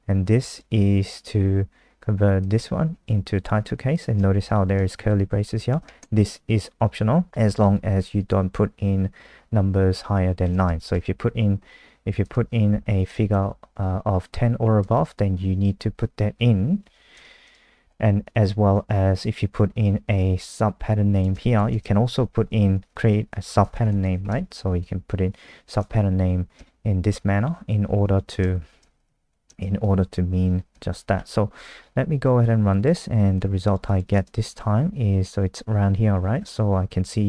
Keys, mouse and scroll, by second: 4.5 Right, 4.8 shift+Left, 5.5 Left, 7.3 Right, 7.3 BackSpace, 10.4 KP_9, 10.9 BackSpace, 11.6 ctrl+z, 12.2 click, 12.8 Right, 12.9-13.8 typing, 14.9 BackSpace, 15.4 1, 17.1 ctrl+s, 17.5 click, 21.6-24.8 typing, 26.6 ctrl+shift+Left, 28.3 Right, 28.5-30.3 typing, 30.7 ctrl+s, 31.2 F5, 32.4 click.